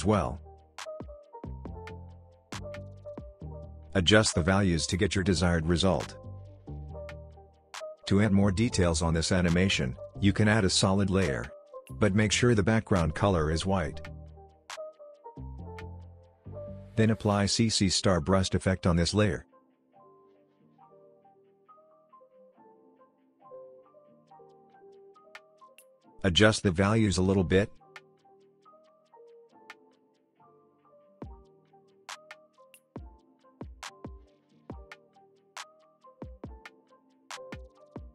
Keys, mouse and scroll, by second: 0.9 ctrl+space, 1.4-2.8 typing, 2.9 Return, 6.3-7.9 drag, 8.3 u, 9.3 click, 9.5 right click, 10.1 click, 14.7-16.9 typing, 17.0 Return, 18.1 ctrl+space, 18.7-19.1 typing, 21.2 BackSpace, 21.3 s, 23.1 t, 24.0 Return, 26.5-30.0 drag, 33.6-34.7 alt+scroll up 2, 36.4-38.1 drag.